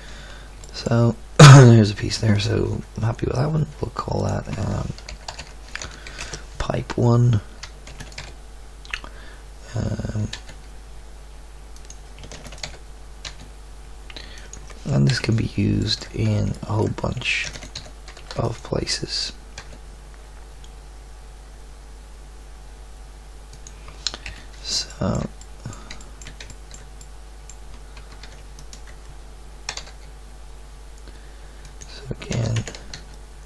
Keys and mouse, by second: 4.2-6.2 right drag, 7.9 shift+d, 8.1 g, 12.3 shift+d, 12.6 g, 15.1 KP_3, 17.4 shift+d, 17.7 r, 19.6 g, 24.2 KP_1, 24.9 middle drag, 25.5-26.7 middle drag, 27.9 Tab, 29.7 g, 32.3 e, 32.9 s.